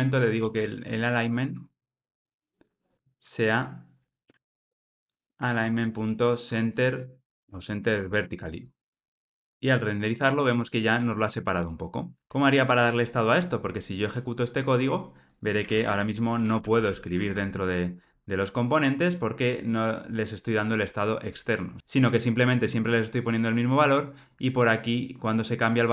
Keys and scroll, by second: 2.9 Return, 12.9 ctrl+r.